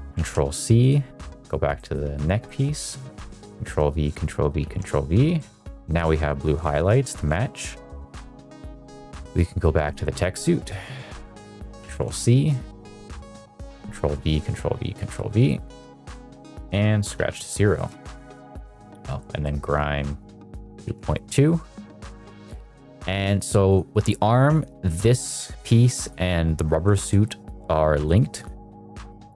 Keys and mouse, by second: 0.0 ctrl+c, 1.8 middle click, 2.4 middle click, 2.8 middle click, 3.5 ctrl+v, 4.0 ctrl+v, 4.6 ctrl+v, 5.3 middle click, 5.7 middle drag, 6.7 middle drag, 6.9 middle drag, 7.3 middle drag, 7.8 middle drag, 8.1 shift+middle drag, 8.4 middle drag, 8.7 shift+middle drag, 9.3 middle drag, 9.7 click, 11.7 ctrl+c, 12.4 middle drag, 12.8 click, 14.0 ctrl+v, 14.4 ctrl+v, 15.0 ctrl+v, 15.4 middle click, 16.5 click, 17.7 middle click, 17.9 shift+middle click, 18.8 middle click, 19.4 middle click, 20.1 click, 21.8 middle click, 22.5 click, 23.0 drag, 23.3 drag, 23.6 click, 24.5 click, 26.9 shift+middle click, 29.0 drag.